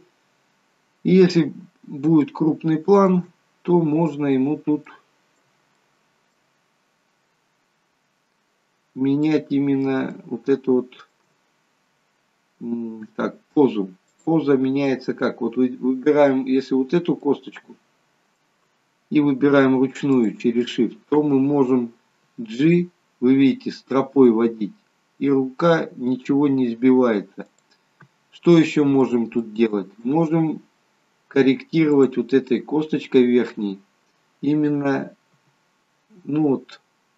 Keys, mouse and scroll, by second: 0.5-2.1 scroll up 11, 2.1 scroll up 5, 2.3 shift+middle click, 3.4-4.7 scroll up 13, 4.9 shift+middle click, 5.8 middle click, 6.6-8.5 scroll down 32, 9.0 scroll down 1, 9.3 middle click, 10.1 shift+middle click, 11.7 scroll up 2, 14.1 click, 17.2 shift+middle click, 20.1 shift+click, 22.3 g, 28.3 scroll down 2, 28.6 middle click, 29.4 shift+middle click, 32.0 click, 32.7-34.0 scroll down 2, 34.0 scroll down 1, 35.3 g.